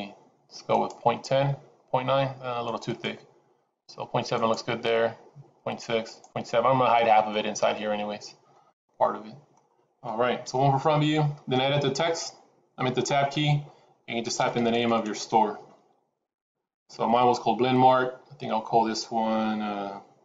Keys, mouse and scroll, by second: 0.6 click, 2.5 click, 2.9 click, 4.3 click, 6.0 click, 6.9 middle click, 7.7 middle click, 10.3 KP_1, 13.1 Tab, 14.3-14.9 BackSpace.